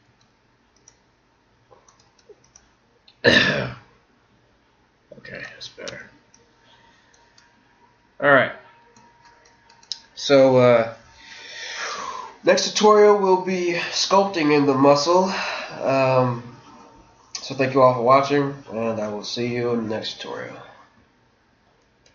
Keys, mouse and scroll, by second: 0.0 g, 1.9 right click, 2.1 g, 5.4-6.5 middle drag, 5.9 Tab, 7.6 middle click, 9.1 middle click, 9.8-11.5 middle drag.